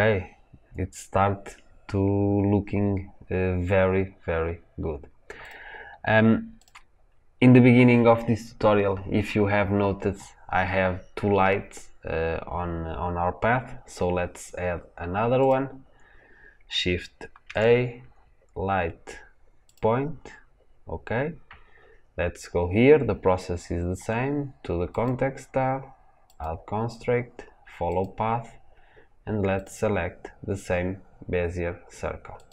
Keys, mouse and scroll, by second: 5.5 click, 6.5-14.7 drag, 15.3 click, 19.6 shift+a, 27.9-32.5 drag.